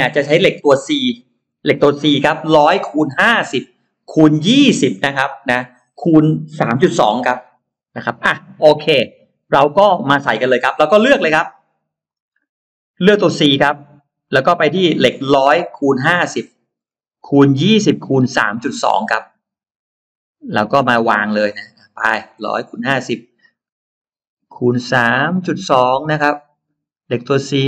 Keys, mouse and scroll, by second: 11.9 click, 13.3 click, 14.3-14.6 scroll down 2, 14.6-15.6 scroll up 2, 17.6-18.3 scroll up 2, 19.0 scroll down 2, 21.4-22.2 scroll up 4, 22.7 scroll up 2, 23.9-24.6 scroll down 4, 25.0 scroll down 2, 25.6 scroll down 2, 26.6 middle click, 27.0 middle click.